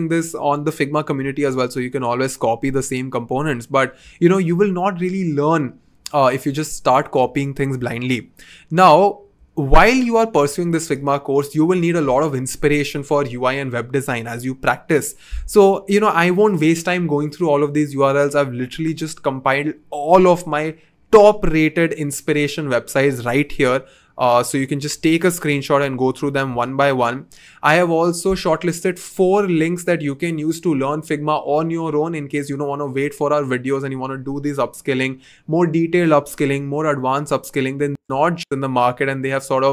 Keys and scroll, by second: 7.7 2, 24.9 typing, 26.5 typing.